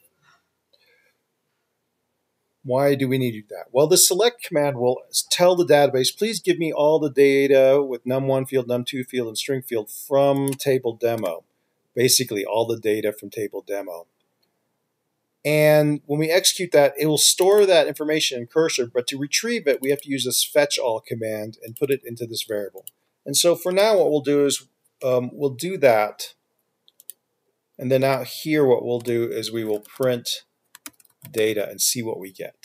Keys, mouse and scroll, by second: 8.1 typing, 11.6 typing, 17.8 typing, 17.8 double click, 20.2 double click, 24.0 Return, 25.2 BackSpace, 28.3 Return, 29.2 Return, 29.8-32.6 typing.